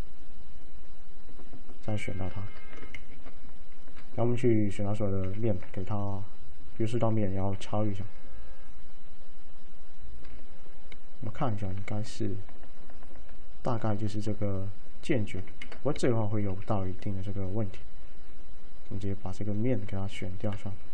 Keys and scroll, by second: 3.1 ctrl+shift+a, 5.3 ctrl+a, 7.6 alt+a, 15.6 ctrl+z.